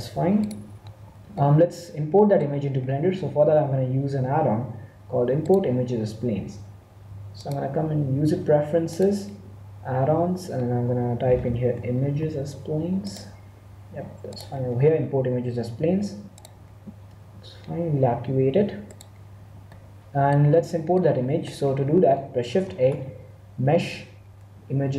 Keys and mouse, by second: 1.3-4.2 middle drag, 5.4-7.2 drag, 19.7-22.7 middle drag, 22.6 shift+a.